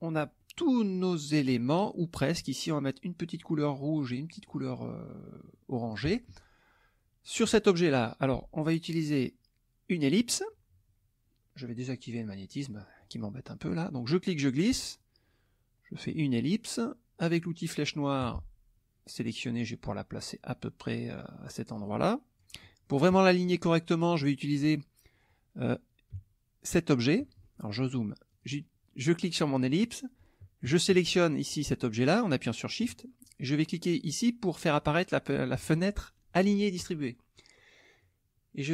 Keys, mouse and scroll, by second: 0.4 click, 1.5 click, 3.8 click, 4.3 click, 4.8 scroll up 2, 4.8-6.0 middle drag, 7.4 click, 10.1 click, 12.1 click, 12.7 middle click, 13.9-16.3 drag, 18.2 click, 19.4-22.6 drag, 26.7 shift+click, 27.4 shift+click, 28.3 click, 28.9 middle click, 31.2 shift+click, 34.8 click, 38.0-38.7 drag.